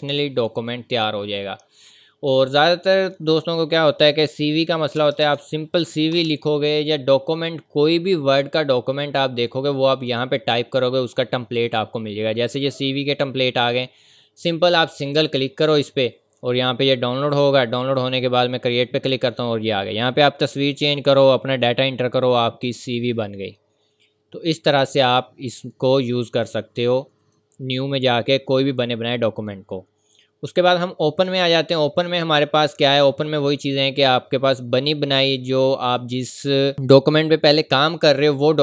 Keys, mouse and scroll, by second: 2.3 click, 5.0 typing, 6.1 Return, 11.6 Return, 11.9-12.5 scroll down 1, 13.0-13.5 scroll up 1, 15.0 click, 19.5 scroll down 1, 19.9 scroll up 1, 20.5 click, 20.8-21.2 scroll down 1, 22.3 scroll up 1, 24.8 click, 27.2 click, 28.9 scroll down 1, 32.3 click, 33.5-33.9 scroll down 1, 34.4-36.7 scroll up 1, 38.1-38.6 scroll up 1.